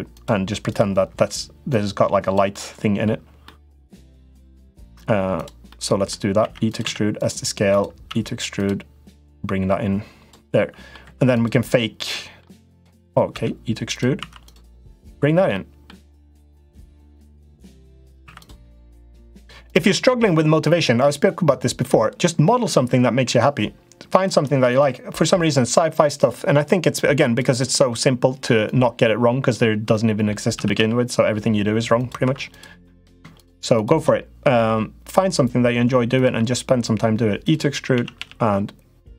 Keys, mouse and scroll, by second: 0.5 click, 0.9 l, 1.4 click, 2.4 middle click, 3.3 middle click, 5.2 click, 5.4 middle click, 6.2 e, 6.6 s, 7.5 click, 7.8 e, 9.1 click, 10.3 middle click, 10.8 3, 11.1 click, 11.9 middle click, 13.1 e, 14.0 2, 14.2 click, 15.3 middle click, 16.4 click, 17.4 middle click, 18.1 click, 18.1 3, 18.4 middle click, 19.5-20.6 drag, 20.8 typing, 20.9 middle click, 24.0 shift+middle click, 24.5 click, 25.1 l, 25.9-27.2 drag, 27.5 middle click, 28.4 click, 29.8 middle click, 30.3 s, 31.7 s, 32.0 s, 32.3 click, 32.6 middle click, 33.1 shift+click, 34.3 i, 36.1 e, 37.7 a, 37.9 g.